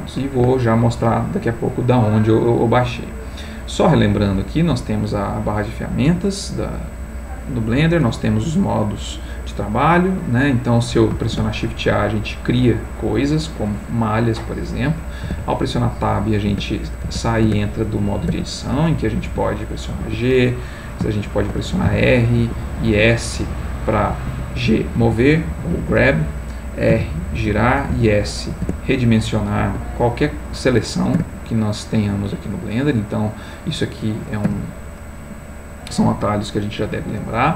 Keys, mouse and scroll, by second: 9.1 click, 9.9 click, 11.2 shift+a, 12.5 click, 15.2 Tab, 16.5 Tab, 18.3 Tab, 18.8 click, 19.3 g, 20.0 Escape, 21.3 shift+click, 21.8 shift+r, 22.4 shift+Escape, 22.8 s, 24.3 Escape, 25.0 g, 25.6 Escape, 26.9 r, 27.5 Escape, 27.9 s, 28.7 Tab, 29.6 Escape, 31.1 Tab, 34.4 x.